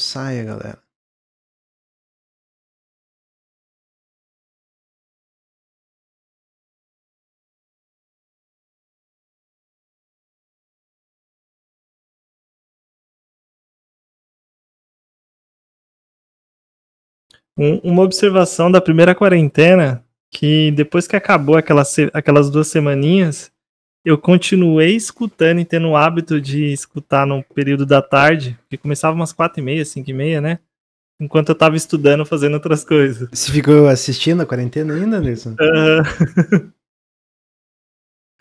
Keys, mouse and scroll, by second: 19.8-22.9 middle drag.